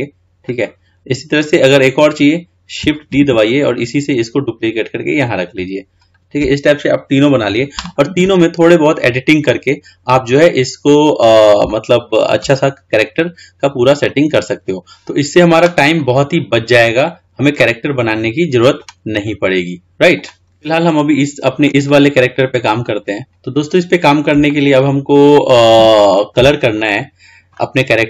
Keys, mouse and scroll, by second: 3.4 shift+d, 9.1 click, 10.7-11.1 scroll up 2, 11.1-11.7 scroll down 3, 11.9-12.9 shift+middle drag, 12.9 scroll up 4, 13.3 scroll down 2, 17.8-20.4 middle drag, 21.0-22.9 middle drag, 23.4-24.7 scroll down 3, 24.7-26.0 shift+middle drag, 26.0-28.0 scroll up 2.